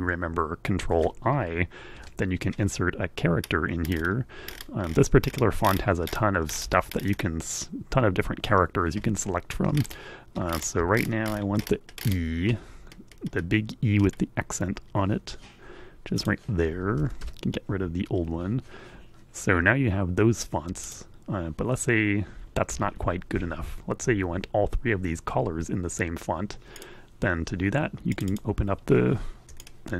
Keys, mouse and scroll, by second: 1.2 ctrl+i, 6.1-7.1 scroll up 4, 9.7 ctrl+scroll up 2, 10.2 ctrl+scroll up 4, 11.1-12.4 shift+scroll up 2, 12.4-15.9 scroll down 2, 15.9 click, 16.7 BackSpace, 20.4 click, 25.9 click, 26.7-28.2 drag, 29.3-29.9 super+drag.